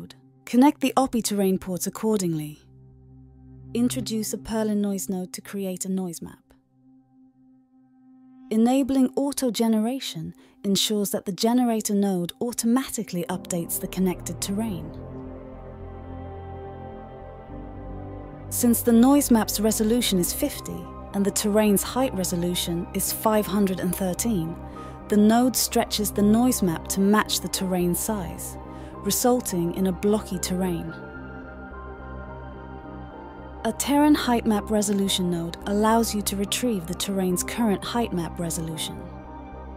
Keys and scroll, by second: 3.9-5.6 typing, 14.5-15.2 typing, 16.7-17.4 typing, 32.2 d, 36.2-37.0 typing, 37.4 Return.